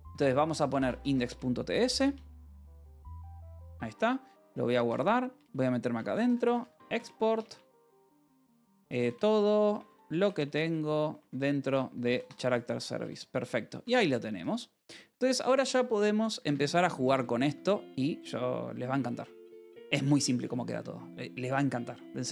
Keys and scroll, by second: 0.0-1.9 typing, 3.0 t, 3.2 Escape, 3.3 Return, 4.1-13.3 typing, 4.3 Return, 5.2 Return, 11.9 Escape, 15.3 space, 16.2 Escape, 16.8 j, 17.0 Return, 18.2 alt+Tab, 18.3 j, 21.4 k.